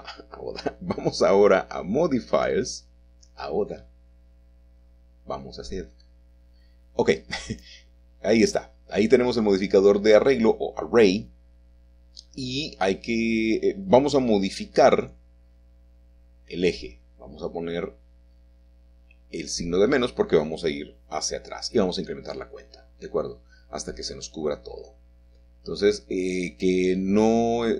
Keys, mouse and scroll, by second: 2.7 middle click, 4.0 click, 5.9 click, 9.1-11.1 scroll down 2, 11.1-12.2 scroll down 1, 13.0-13.8 scroll down 2, 13.8-15.3 scroll down 1, 16.6 click, 17.4 click, 18.6 BackSpace, 22.9-24.9 drag, 24.9-26.6 middle drag, 26.0-27.1 scroll up 2, 27.1 shift+middle click.